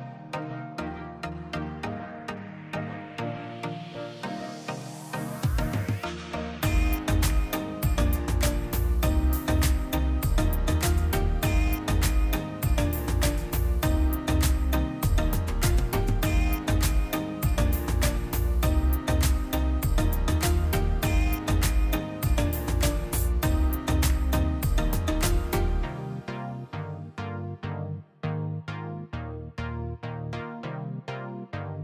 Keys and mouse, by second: 2.0 click, 3.0 z, 3.4-4.4 drag, 5.1 click, 8.3 Tab, 9.1-10.3 right drag, 11.4 click, 15.6 click, 18.5-19.7 drag, 19.7 /, 21.7 click, 23.5-27.8 drag.